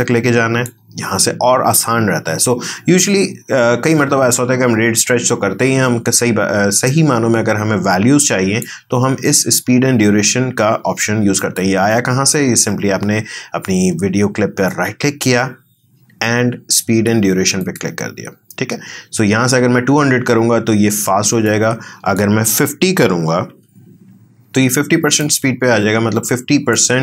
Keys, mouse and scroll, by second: 26.2 click.